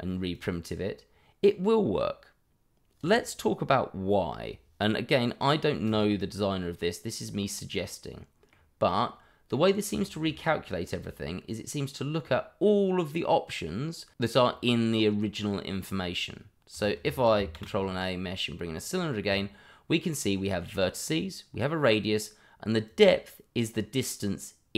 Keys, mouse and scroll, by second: 0.3 click, 5.8 click, 6.6 middle click, 10.4-12.1 scroll up 1, 16.7 click, 17.1 middle click, 17.5 shift+a, 18.8 click, 22.8 click.